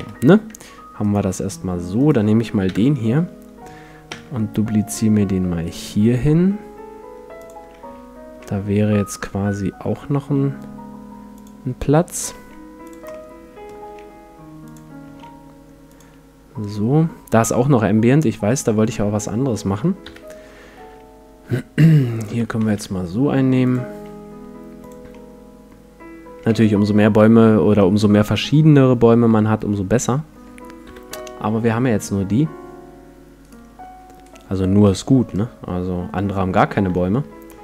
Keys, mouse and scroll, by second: 0.0 F11, 0.0-1.5 drag, 1.0-3.8 right drag, 2.7 KP_7, 4.1 shift+d, 7.5-9.2 drag, 8.4 r, 11.5-13.1 drag, 12.3 s, 13.1-15.1 middle drag, 13.6-17.8 drag, 13.8 s, 15.1 s, 20.0 KP_7, 22.1-24.1 right drag, 22.6 shift+d, 23.7-25.1 drag, 23.9 s, 25.1 middle click, 25.6-26.7 drag, 26.4 a, 26.7-28.6 middle drag, 30.9 KP_7, 33.4-36.6 right drag, 35.3-37.6 middle drag.